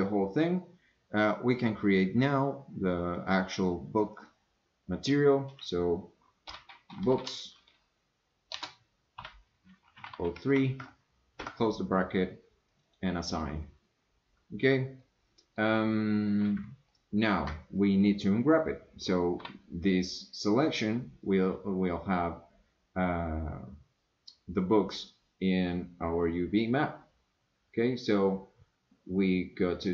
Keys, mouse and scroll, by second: 1.7 click, 3.3-12.2 drag, 7.0 o, 12.7 click, 15.0 middle click, 16.9-17.3 shift+middle drag, 19.4 u.